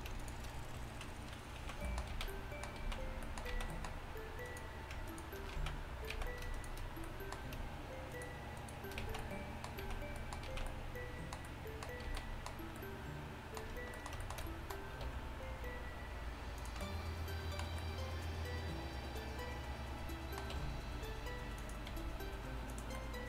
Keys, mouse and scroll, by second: 1.6 z, 2.2 z, 2.8 z, 3.6 z, 4.7-5.6 drag, 5.6 right click, 5.6 z, 6.2-7.0 drag, 6.2 z, 7.0 right click, 7.3-8.4 drag, 8.4 shift+right click, 9.1 z, 9.6 click, 9.9 z, 10.5 z, 12.1 z, 15.1 r, 16.9-18.5 middle drag, 20.6 r, 22.0 g.